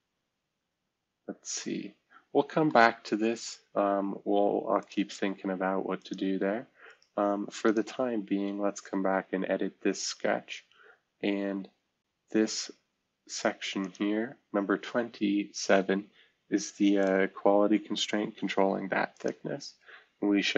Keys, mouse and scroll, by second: 1.4-4.1 middle drag, 4.8 click, 8.7-9.2 scroll down 2, 9.2-10.6 scroll up 2, 10.6-11.3 scroll up 1, 14.9-15.7 scroll down 2, 15.7-16.9 scroll down 1, 16.9 click, 18.2 Delete, 19.1 click.